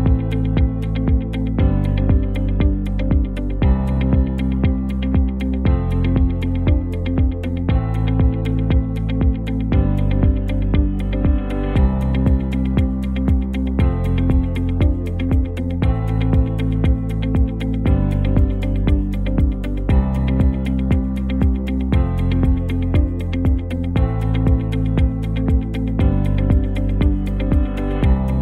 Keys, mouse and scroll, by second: 5.1 shift+click, 5.5 v, 6.1 click, 8.6 shift+right click, 9.1 click, 9.9 ctrl+c, 10.4 ctrl+Tab, 11.0 ctrl+v, 11.5 alt+scroll down 1, 12.3 ctrl+t, 13.1-15.1 ctrl+drag, 19.2 ctrl+v, 20.3 ctrl+click, 23.8 alt+scroll down 1, 24.1 alt+scroll up 1, 24.8-25.2 alt+scroll down 1, 28.3 t.